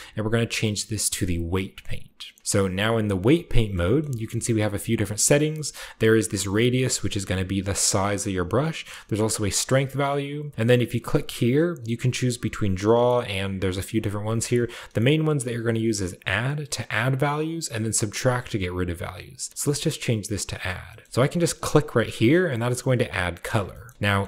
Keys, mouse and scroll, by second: 1.2-2.4 drag, 2.9 click, 3.3-5.1 middle drag, 3.9-5.5 shift+scroll down 2, 7.6 click, 9.0 click, 11.0 click, 16.0 click, 16.9 click, 18.0 click, 19.0 click, 20.3 click, 20.7 shift+middle click, 21.1-21.4 shift+scroll up 1, 21.6 click, 22.4 scroll up 1, 22.9 click, 23.6-24.2 shift+middle drag, 23.8-24.2 scroll up 3.